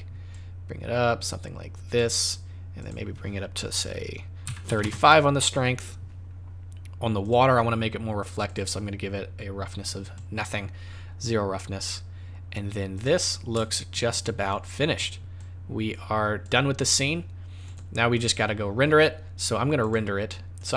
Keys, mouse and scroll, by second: 0.3 click, 2.8 click, 7.2 click, 8.4 click, 9.9 click, 13.0 click, 14.2 shift+click, 15.3 click, 17.6 click, 19.8 click, 20.5 click.